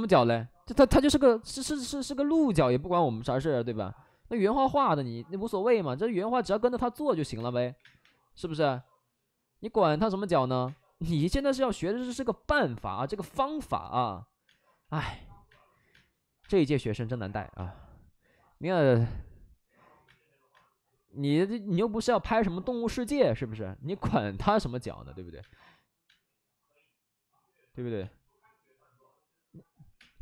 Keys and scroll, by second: 0.4 alt+s, 1.1 ctrl+z, 4.8 ctrl+z, 6.0 alt+s, 7.3 space, 7.7 3, 7.7 space, 7.9 3, 9.6 ctrl+z, 10.6 space, 11.3 space, 14.9 space, 15.4 space, 15.5 space, 15.9 space, 17.5 space, 23.8 alt+s, 24.5 alt+s, 25.3 space, 26.0 space, 27.9 space, 29.8 5, 29.9 space.